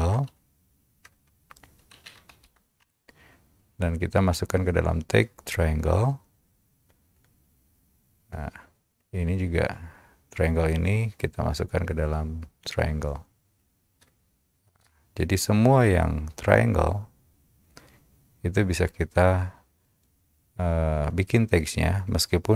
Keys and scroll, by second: 0.0-0.4 typing, 1.9-3.0 typing, 14.1 Return.